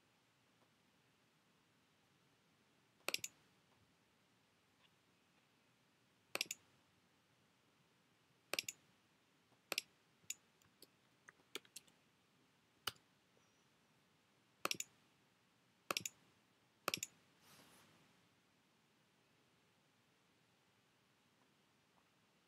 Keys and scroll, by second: 10.4-12.3 typing, 12.9 Return.